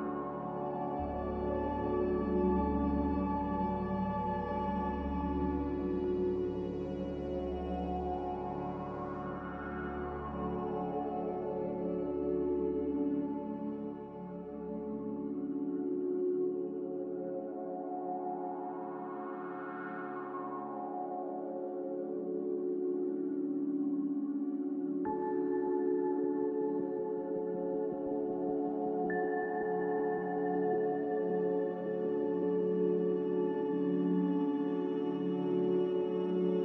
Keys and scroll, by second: 3.9 z, 7.3 typing, 7.8 Return, 15.4 1, 15.6 Return, 15.6 0, 17.8 z, 19.2 typing, 21.3 typing, 29.3 2, 29.5 0, 29.5 Return, 32.1 5, 32.3 Return.